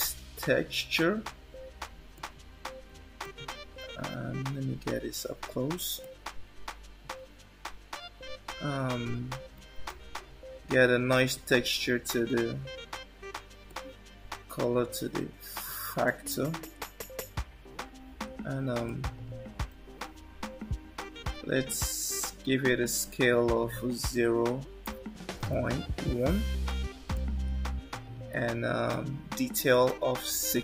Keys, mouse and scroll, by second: 4.0-4.6 scroll up 8, 6.0 shift+middle click, 9.8 shift+middle click, 11.6-12.7 scroll down 3, 13.7 click, 18.0 scroll down 2, 19.1 shift+middle click, 19.9-21.0 scroll up 5, 22.8 click, 28.9 click.